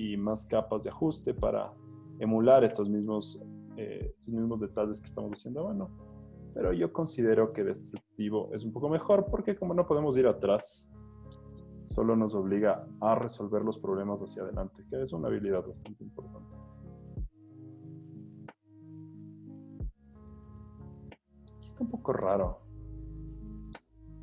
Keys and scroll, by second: 0.4 o, 2.9 z, 3.6 z, 5.5 h, 12.7 super+l, 17.5 z, 20.0 z, 21.1 v.